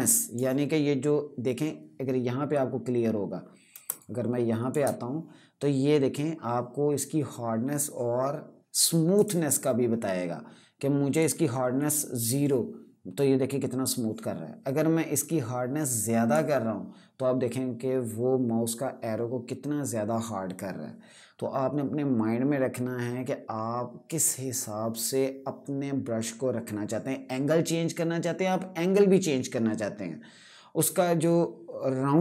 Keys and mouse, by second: 3.6 click, 4.1 space, 8.8 right click, 10.9 click, 14.9 click.